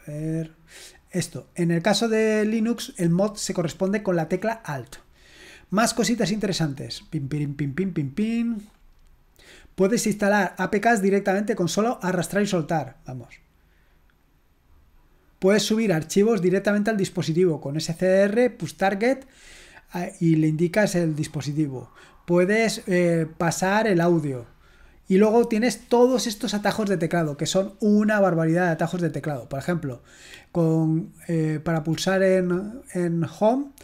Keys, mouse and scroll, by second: 2.9 click, 6.2-6.7 scroll down 1, 14.0-14.9 scroll up 1, 14.9-15.3 scroll down 1, 19.9-20.7 scroll down 1, 21.3-22.4 scroll down 3, 22.6-23.5 scroll up 2, 24.1-25.5 scroll down 2.